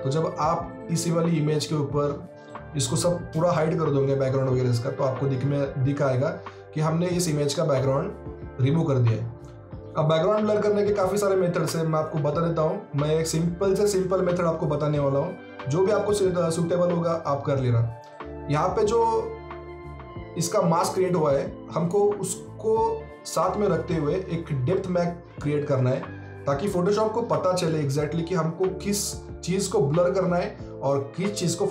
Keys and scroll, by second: 2.2 ctrl+alt+d.